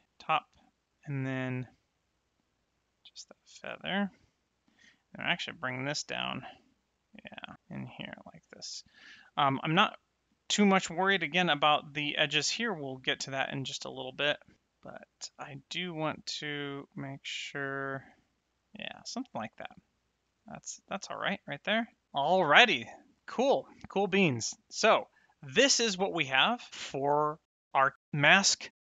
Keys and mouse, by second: 2.1 click, 4.9 click, 13.9 click, 15.6 click, 19.6 middle click, 23.0 middle click, 25.1 middle click.